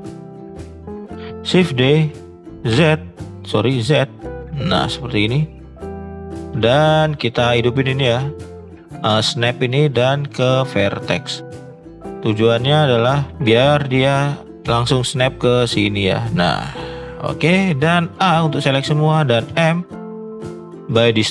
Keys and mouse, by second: 0.5 shift+click, 0.8 middle click, 1.7 shift+d, 5.6 middle click, 5.8 middle click, 6.4 shift+middle click, 6.9 shift+middle click, 9.6-11.8 drag, 12.3 middle click, 13.3 ctrl+z, 14.6 g, 16.9-17.3 middle drag, 18.2 a, 19.4 m.